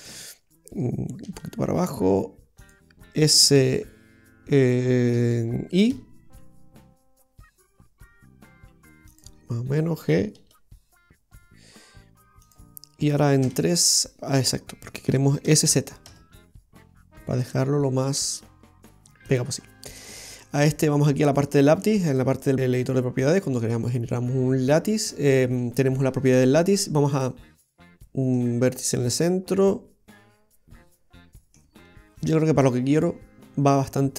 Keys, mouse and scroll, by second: 1.3 g, 3.4 s, 10.5 g, 13.5 KP_3, 14.4-14.7 scroll down 2, 15.5 s, 19.7-20.0 scroll up 2, 20.0 middle click, 22.1 click, 27.2 click, 27.9 middle click, 27.9-28.3 scroll up 2, 29.7 middle click, 31.7 scroll up 1, 33.7-34.1 scroll down 1.